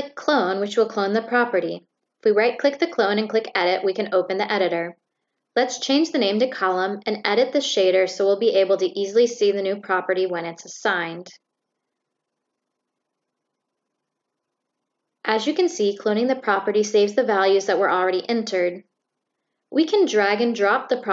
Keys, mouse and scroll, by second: 0.7 click, 1.0 right click, 2.1 click, 3.1 click, 6.6 click, 8.3 click, 9.7 click, 10.9 click, 13.9 click, 17.7 click, 19.6-20.9 drag.